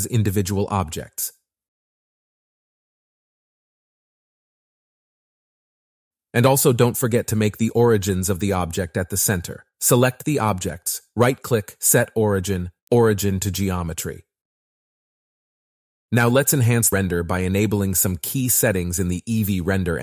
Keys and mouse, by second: 0.0 Tab, 1.3 shift+click, 1.9 click, 2.3 Tab, 2.3 KP_1, 2.4 ctrl+l, 2.8 p, 3.4 click, 4.1 click, 4.2 ctrl+l, 4.3-9.4 typing, 4.4 click, 4.5 ctrl+l, 4.7 click, 4.8 ctrl+l, 5.0 ctrl+l, 5.1 shift+click, 5.3 ctrl+l, 5.5 click, 5.6 ctrl+l, 5.7 Tab, 5.7 click, 5.8 Tab, 5.9 click, 6.4 click, 6.9 ctrl+z, 7.0 click, 7.0 ctrl+l, 7.4 click, 7.9 ctrl+l, 8.3 click, 8.5 ctrl+l, 8.8 shift+click, 9.0 click, 9.2 ctrl+l, 9.6 Tab, 13.1 Tab, 13.2 click, 14.3 middle click, 15.6 z, 16.8-18.1 middle drag, 19.1 middle click.